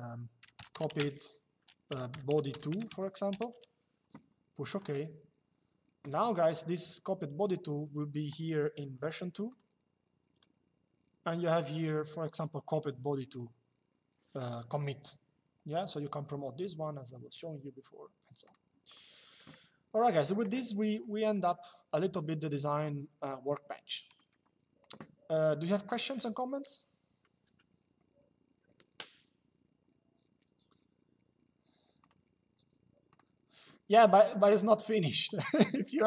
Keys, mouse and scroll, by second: 0.7-3.1 typing, 4.4 click, 9.2 click, 18.1 click, 20.7 shift+middle click, 31.7 click, 32.8 click, 34.1 click, 35.9 click.